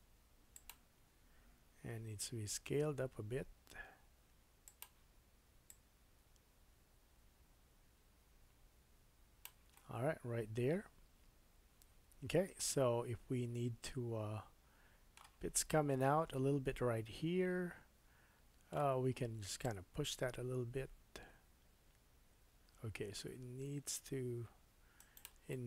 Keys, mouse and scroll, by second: 1.6 s, 2.0-7.1 drag, 5.7-7.1 middle drag, 5.7-7.1 right drag, 9.7 middle click, 16.3-19.4 middle drag, 19.6-25.2 drag, 22.7-25.1 right drag, 25.2-25.6 middle drag.